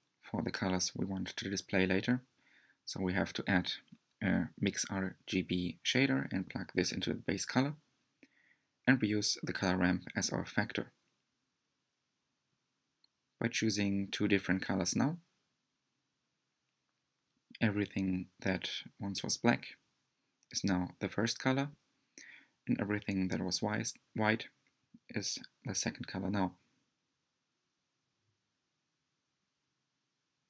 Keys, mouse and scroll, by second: 5.8-7.6 drag, 8.0 click, 13.5 click, 29.3 click.